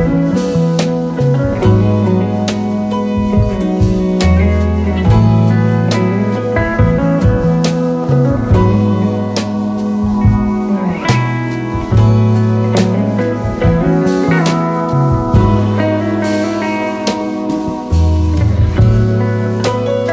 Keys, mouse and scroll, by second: 2.5 click, 6.3-7.4 scroll down 1, 7.4 click.